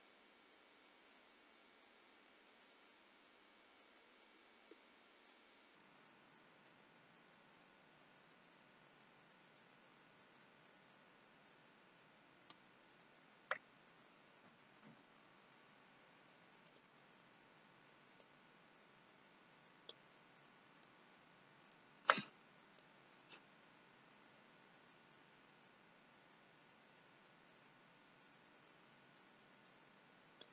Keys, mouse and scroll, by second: 1.8 middle click, 3.8 middle click, 5.1 middle click, 14.6 a, 14.9 i, 18.6 click, 20.6 scroll down 3, 20.9 middle click, 23.1 click.